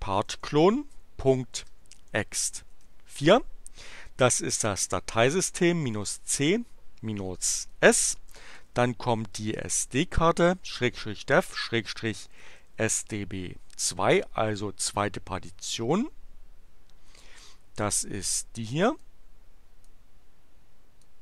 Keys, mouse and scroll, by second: 0.0-2.7 typing, 4.9-9.6 typing, 12.1-13.0 typing, 19.0-20.0 drag, 21.0 click.